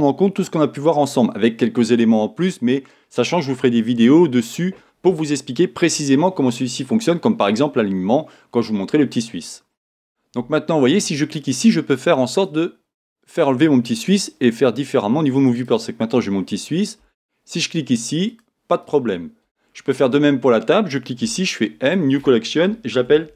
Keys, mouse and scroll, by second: 11.3 click, 12.3-13.9 drag, 15.5 click, 18.2 click, 18.8 click, 19.9-21.2 drag, 21.2 m.